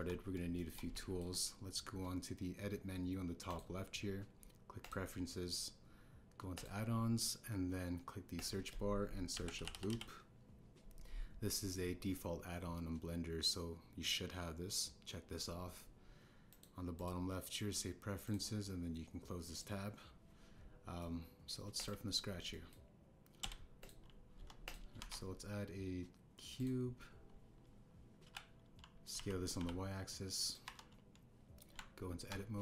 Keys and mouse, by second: 0.9 KP_1, 1.5 shift+drag, 1.9 ctrl+drag, 4.4-5.9 drag, 21.9-22.4 middle drag, 22.7 click, 23.5 drag, 24.4 x, 25.3 KP_1, 25.6 click, 25.9 shift+a, 29.2 KP_3, 30.1 s, 30.5 y, 31.6 KP_1.